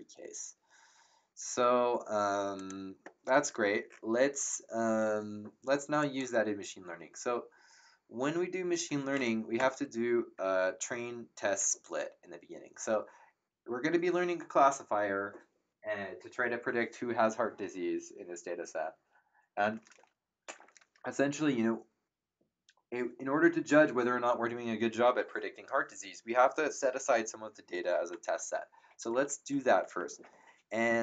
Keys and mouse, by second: 2.5 click, 6.0 click, 9.5 Return, 9.5 KP_Enter.